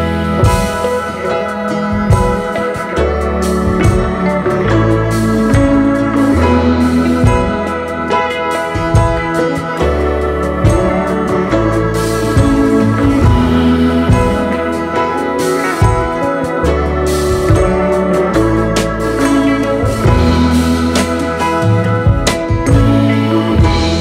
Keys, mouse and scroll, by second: 0.4 alt+scroll up 2, 0.6-5.5 typing, 4.6 alt+scroll down 1, 5.5 scroll down 1, 6.2 alt+scroll down 1, 7.2 alt+scroll down 1, 7.5 space, 12.4-13.2 typing, 16.1-17.8 typing, 18.8 typing, 19.4-19.7 alt+scroll up 3, 19.8 space, 20.4 alt+scroll up 1, 21.0 typing.